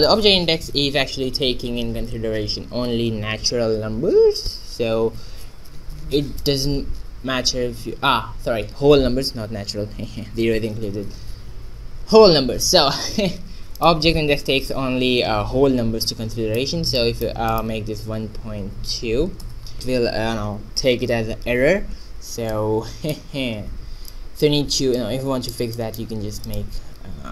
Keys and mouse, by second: 6.4-8.3 drag, 16.0 middle click, 16.9-19.0 drag, 22.5-25.0 middle drag, 25.0-27.3 drag.